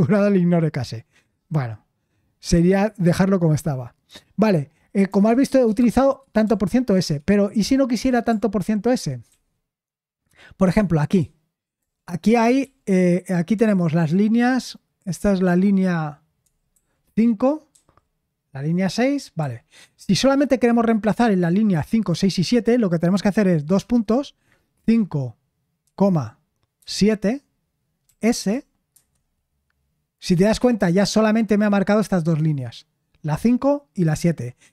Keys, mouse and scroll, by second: 5.7-6.4 typing, 6.9 Escape, 8.6 ctrl+d, 9.3 ctrl+d, 10.8-13.1 typing, 16.4-17.7 typing, 19.4 typing, 24.7 5, 26.7 7, 28.0-29.4 typing.